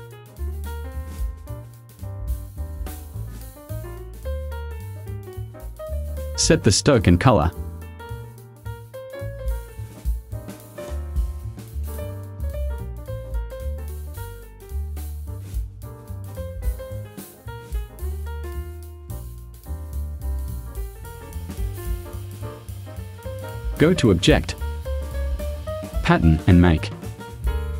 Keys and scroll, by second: 0.0 Tab, 0.4 0, 0.7 ,.